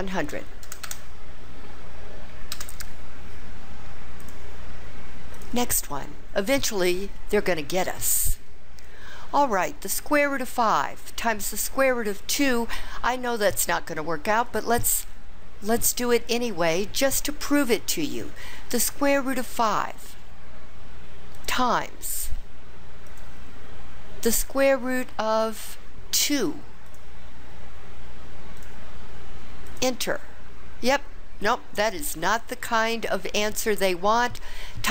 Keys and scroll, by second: 18.0 5, 19.5 ), 21.3 *.